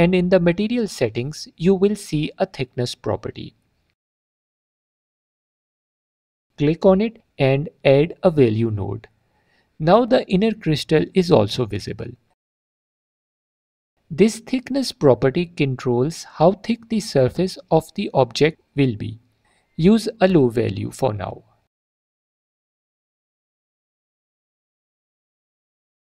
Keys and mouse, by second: 0.6 middle click, 2.7-3.8 drag, 5.8 click, 8.8-11.4 drag, 12.9 click, 13.7 click, 13.9 click, 14.6 click, 15.2 alt+click, 21.4-26.0 shift+drag.